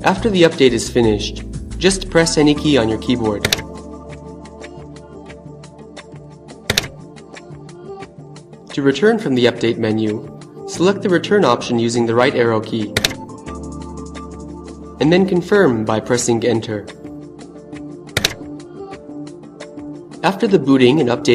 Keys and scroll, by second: 4.8 Return, 10.9 Right, 15.8 Return.